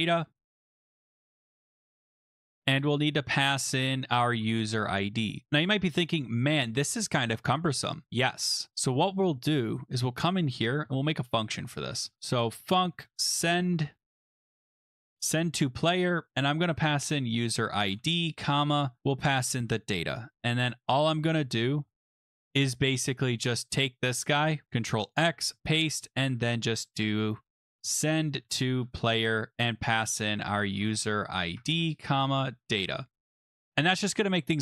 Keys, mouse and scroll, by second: 0.0-0.4 typing, 0.8 click, 2.5 click, 2.5 click, 3.8-5.2 typing, 5.4 Tab, 7.0 click, 8.0 click, 9.7 click, 10.5-23.0 typing, 10.8 Return, 12.0 click, 13.7 click, 24.4 click, 24.6 ctrl+x, 25.1 click, 25.3 ctrl+v, 25.8 click, 26.3 Tab, 26.9 Return, 27.4-28.9 typing, 30.2-33.4 typing.